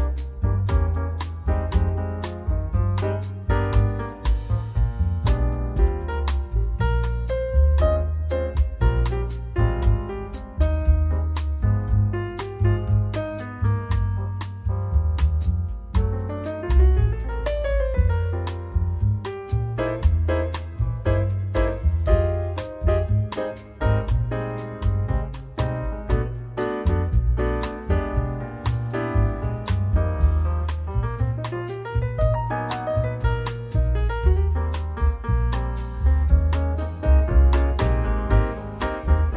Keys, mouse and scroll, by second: 0.2-4.0 drag, 4.7 click, 7.3 Delete, 9.2 click, 10.4 click, 11.2 click, 12.6-12.9 scroll down 1, 13.0-14.4 drag, 14.7 click, 17.0 click, 18.0 click, 19.8 click, 21.5 click, 22.3-23.2 typing, 23.9 click, 26.4 ctrl+z, 26.8 ctrl+click, 27.8 click, 29.3 click, 30.2 1, 30.6 0, 31.4 click, 32.5 click, 34.0 click, 34.7 click, 35.8 2, 36.6 click, 37.2 click, 38.5 click.